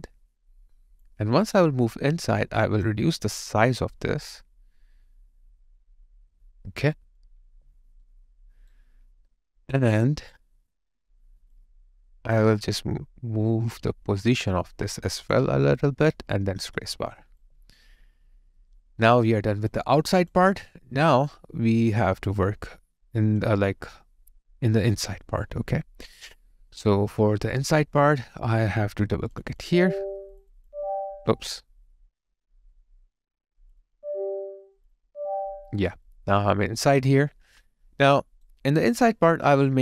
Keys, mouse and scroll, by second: 1.3 alt+right click, 1.8 alt+middle click, 8.0 alt+right click, 16.6 space, 17.4 alt+click, 19.4 alt+right click, 19.7 alt+click, 20.6 alt+right click, 21.3 alt+click, 29.5 double click, 33.8 double click, 35.7 alt+right click, 36.0 alt+middle click, 36.5 alt+right click.